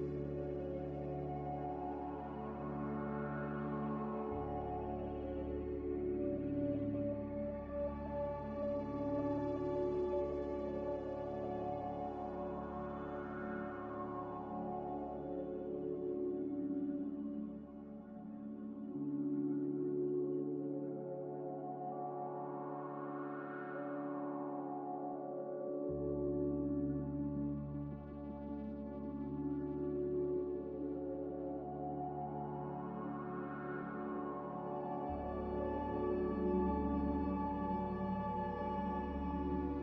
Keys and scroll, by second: 31.8 v.